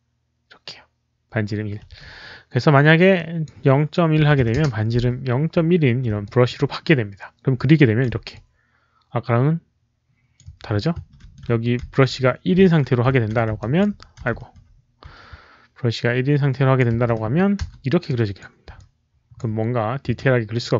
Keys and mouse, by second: 3.1 alt+click, 4.1 KP_Decimal, 4.3 KP_1, 4.5 Return, 6.1 alt+click, 6.3 Return, 6.3 KP_1, 6.3 KP_Decimal, 7.5 alt+click, 8.2-10.3 alt+drag, 9.4 Return, 9.4-11.2 typing, 10.3 Return, 11.2 ctrl+z, 11.2 Return, 11.2 alt+click, 11.7 ctrl+z, 12.5 ctrl+z, 13.0 ctrl+z, 13.5 alt+click, 14.2 shift+z, 16.4 alt+click, 16.4-20.5 typing, 17.5 Return, 18.0 alt+click, 18.7 alt+click, 20.0 alt+click.